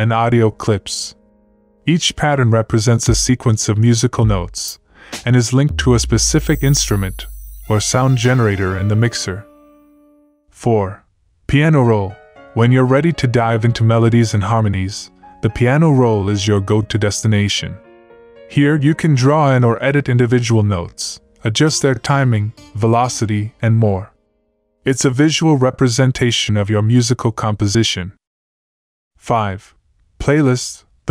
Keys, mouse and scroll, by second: 16.5 click, 16.9 F1, 17.7 F1, 18.1 F1, 28.1 click.